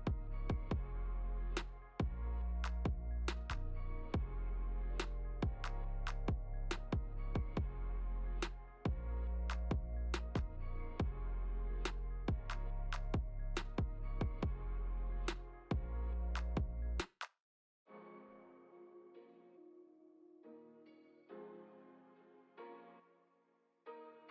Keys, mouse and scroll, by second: 2.4 middle click, 5.3 middle click, 6.5 click, 9.0 click, 15.5 Right, 19.1 click, 20.9 i, 21.8 i, 23.4-23.7 scroll down 2, 23.7 middle click.